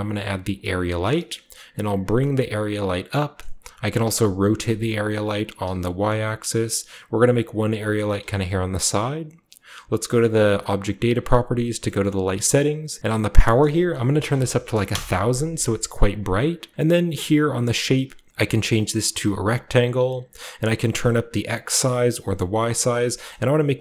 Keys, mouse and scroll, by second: 0.5 click, 1.6 typing, 2.8 click, 4.0-5.5 typing, 7.7 click, 8.0-8.3 typing, 8.2 click, 8.3 click, 8.6-9.8 drag, 10.3 click, 11.3-12.9 drag, 12.0 shift+middle click, 12.1-12.9 shift+scroll up 1, 12.9-14.0 scroll up 1, 13.4-15.0 drag, 14.0-16.3 typing, 16.0 click, 17.6 click, 19.4 click, 20.4-22.0 drag, 22.3 click, 23.0-23.8 scroll down 1, 23.2-23.8 middle drag, 23.5 r, 23.7 click, 23.7 g.